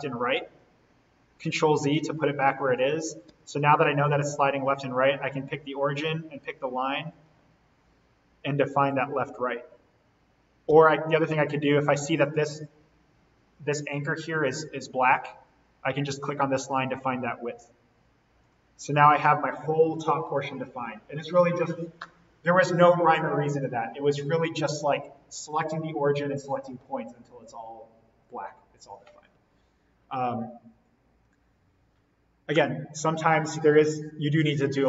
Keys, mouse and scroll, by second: 1.9 ctrl+z, 2.6 click, 3.3 d, 5.3 click, 10.7-11.2 typing, 13.3-13.7 scroll down 1, 16.1 click, 18.9-19.2 scroll up 1.